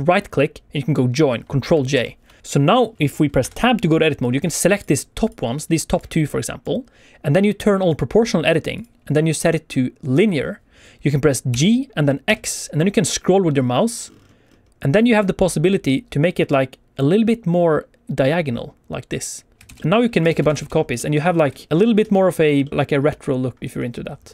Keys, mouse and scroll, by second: 1.9 ctrl+j, 2.4 click, 2.7 click, 3.3 Tab, 4.2 click, 4.3 alt+a, 4.3 click, 4.7 click, 5.2 click, 5.7 click, 6.0 click, 7.8 click, 8.7 click, 11.4 g, 12.2 x, 12.9-14.7 scroll down 15, 19.5 shift+Tab, 19.5 click, 19.7 shift+d, 19.7 middle click, 20.1 click, 20.2 shift+r, 20.3 shift+r, 20.5 shift+r, 20.7 scroll down 2, 20.9 shift+middle click, 21.2-21.7 scroll up 2, 21.5 shift+middle click, 22.0 alt+a.